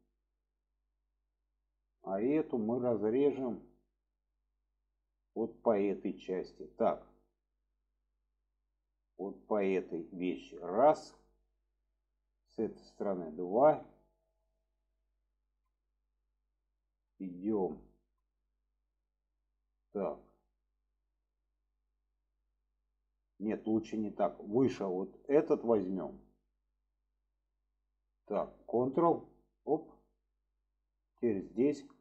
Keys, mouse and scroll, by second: 0.3-4.8 middle drag, 5.8-6.4 middle drag, 7.5 middle click, 10.7 alt+shift+click, 11.2-12.5 middle drag, 13.3 alt+shift+click, 13.9 middle click, 14.5-15.0 shift+middle drag, 15.7 shift+middle click, 18.2 shift+middle click, 19.4-23.5 middle drag, 25.0 click, 25.7-26.0 shift+middle drag, 29.2 ctrl+click, 30.1 scroll up 1, 30.3-31.4 middle drag.